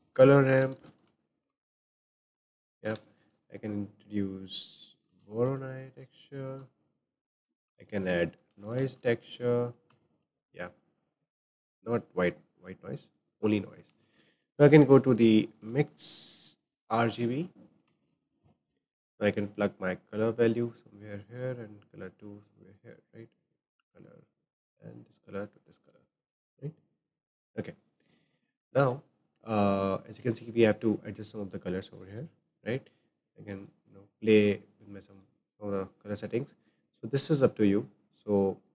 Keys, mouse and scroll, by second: 1.0 middle click, 2.8 shift+a, 7.7 shift+a, 12.1-12.7 drag, 13.1 click, 13.9 shift+a, 19.6 click, 21.4-22.0 drag, 23.0 click, 24.7-25.6 drag, 28.6-30.7 shift+middle drag, 30.7-31.3 scroll up 3, 31.3-32.8 shift+middle drag, 32.8 scroll up 2, 33.7-35.4 drag.